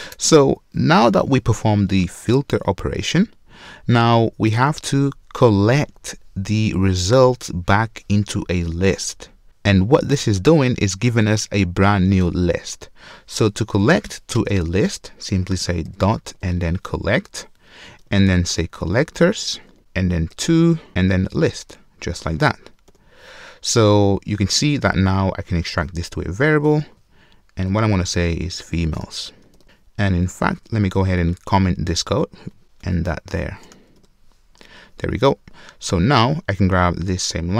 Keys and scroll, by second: 17.2 Return, 21.4 Return, 24.9 super+w, 26.7 alt+super+v.